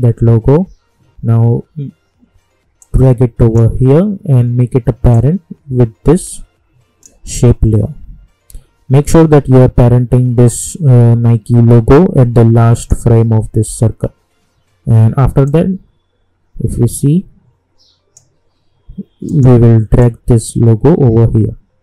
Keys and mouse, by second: 2.8 click, 5.4 click, 12.7 click, 15.4-21.8 drag.